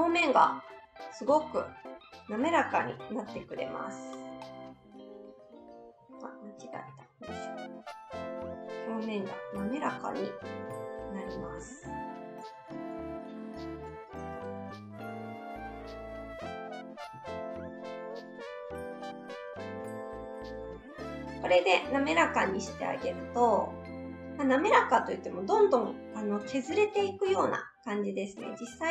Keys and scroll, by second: 6.7 ctrl+z.